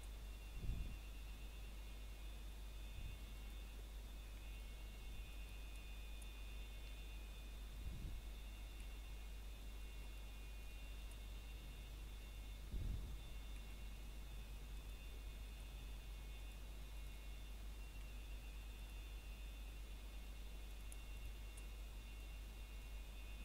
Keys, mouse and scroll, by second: 0.8 s, 2.0 click, 9.7 scroll down 1, 10.1 shift+middle click, 10.8 click, 12.8 scroll down 1, 13.2 shift+middle click, 15.4 ctrl+right click, 17.5 click, 20.8 s, 22.0 click, 22.4 scroll down 1, 22.6 shift+middle click, 23.1-23.4 scroll up 1.